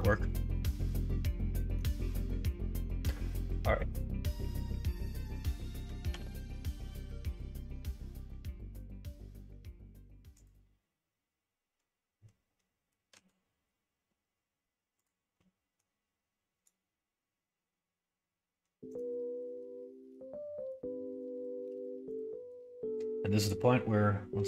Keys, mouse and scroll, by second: 0.0-1.7 middle drag, 6.0 g.